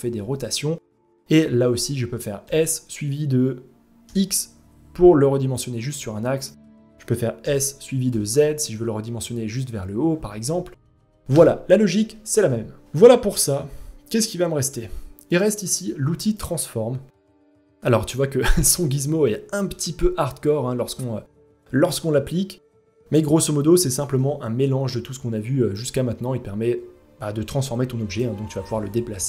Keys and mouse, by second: 2.0 s, 7.0 s, 10.9 Escape, 11.5 ctrl+z, 12.0 ctrl+z, 14.8 click, 18.8-19.1 shift+middle drag, 22.6 click, 23.7 ctrl+z, 25.3-27.7 drag, 28.9 click.